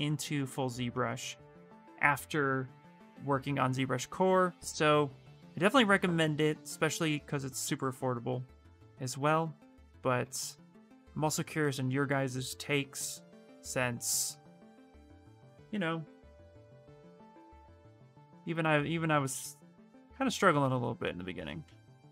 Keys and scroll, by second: 2.3-3.7 typing.